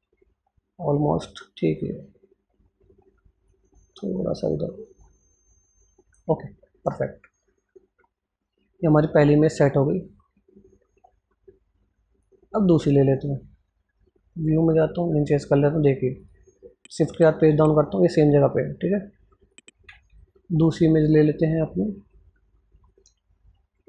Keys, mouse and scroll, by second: 1.2-3.0 scroll up 1, 3.3-6.3 drag, 6.5-7.8 scroll down 1, 11.3 scroll up 1, 16.4 click, 17.3 shift+Page_Down, 17.7 shift+Page_Up, 19.4 click, 19.7 alt+Tab, 20.6-23.8 drag.